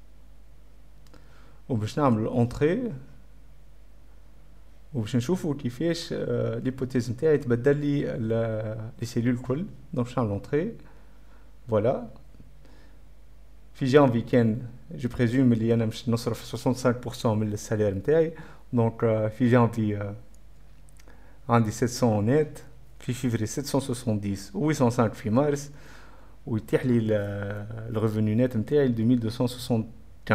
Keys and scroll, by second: 0.7 5, 2.3-3.6 typing, 9.3-11.7 typing, 10.1 Up, 10.1 Return.